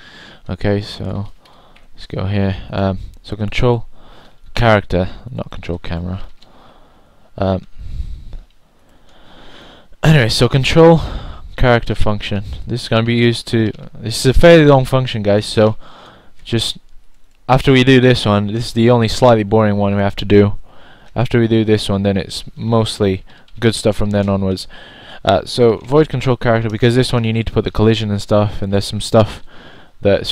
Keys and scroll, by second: 1.8-3.4 typing, 15.3-18.7 typing, 20.3-21.0 typing, 28.7-29.8 typing.